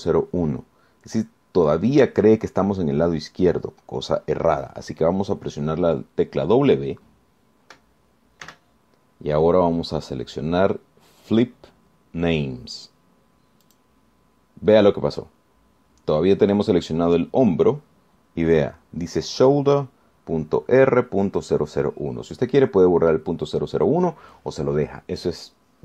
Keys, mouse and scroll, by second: 9.7 w, 14.9 click.